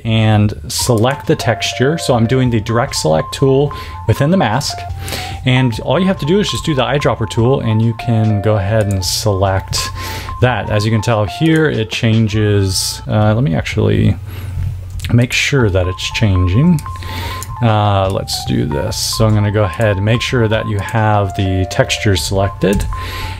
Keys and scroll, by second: 6.5 i, 14.8 v, 19.1 a, 22.6 i.